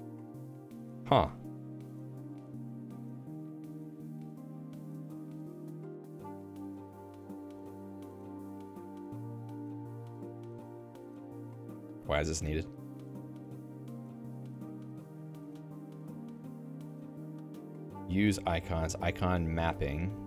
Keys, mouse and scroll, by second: 1.2 Escape.